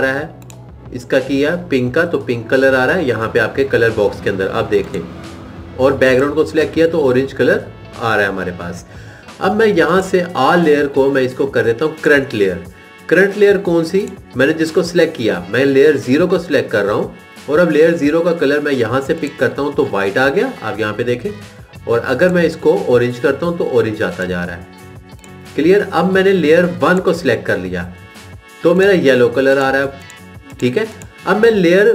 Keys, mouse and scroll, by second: 1.3 click, 6.3 click, 14.4 click, 15.1 click, 19.4 click, 22.4 click, 27.6 click, 29.5 click.